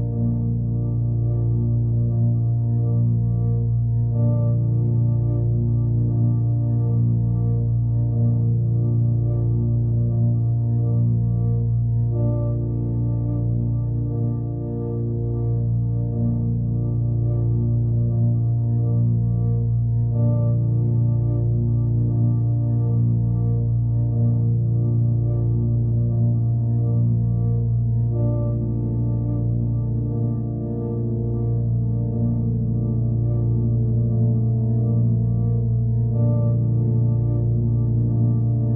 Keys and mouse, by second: 0.6 click, 1.1 click, 1.6 click, 2.9 click, 5.4 click, 6.2-6.6 typing, 7.7 click, 8.2 click, 9.1-10.1 drag, 13.9 click, 16.7-19.1 ctrl+alt+drag, 19.4 alt+click, 20.4-22.5 drag, 23.2-25.5 drag, 27.7 alt+click, 29.0-30.6 drag, 32.2 alt+click, 33.1-34.9 alt+drag, 37.8-38.7 drag.